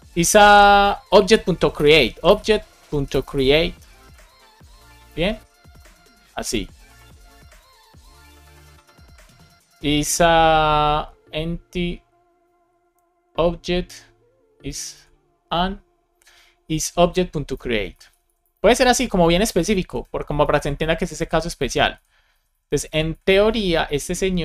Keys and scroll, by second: 0.3 alt+shift+Left, 1.4 shift+o, 4.1 alt+shift+Right, 4.9-7.4 typing, 6.8 Left, 7.7 Left, 8.4 alt+Left, 14.8 alt+shift+Left, 17.4 Left, 17.8 Left, 18.4 alt+shift+Right, 19.1 shift+Right, 19.3 BackSpace, 19.8 space, 20.3 alt+Right, 21.0 alt+Left, 21.4 alt+Right, 21.8 alt+Left, 22.2 Right, 23.4 space.